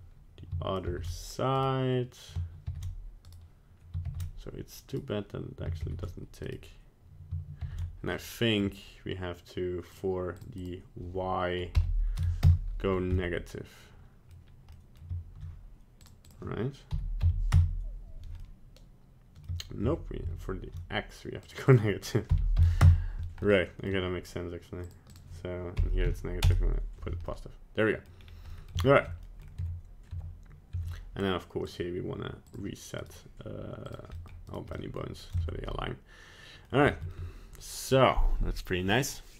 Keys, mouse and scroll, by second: 0.9 ctrl+v, 1.5 right click, 2.6 ctrl+c, 3.2 right click, 4.0 ctrl+v, 4.9 right click, 5.8 ctrl+c, 6.4 right click, 7.6 ctrl+v, 8.1 middle click, 9.9 click, 10.5 click, 13.1 middle click, 14.7 middle click, 15.9 click, 18.6 middle click, 18.8 middle click, 19.8 ctrl+z, 20.2 ctrl+z, 21.4 click, 23.4 middle click, 23.8 middle click, 24.8 click, 27.2 middle click, 28.0 middle click, 28.2 scroll down 2, 28.5 middle click, 28.8 shift+scroll up 1, 28.8 shift+middle click, 28.9 shift+middle click, 29.2 middle click, 29.6 Tab, 30.1 Tab, 30.8 Tab, 31.6 click, 32.4 click, 33.0 right click, 33.8 click, 34.1 middle click, 34.5 right click, 34.7 middle click, 34.9 middle click, 35.4 ctrl+Tab, 35.7 middle click, 36.8 shift+middle click, 37.0 middle click.